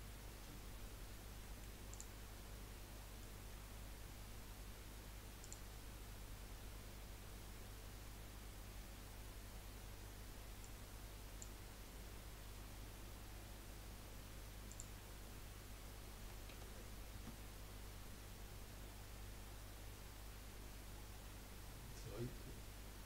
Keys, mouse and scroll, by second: 1.0-1.4 scroll down 1, 1.4 middle click, 1.9 click, 2.5-2.8 scroll down 3, 2.9 middle click, 3.4-4.9 scroll up 1, 4.9-5.4 scroll up 1, 5.4-8.5 drag, 13.3-14.7 scroll down 1, 14.7-17.8 drag.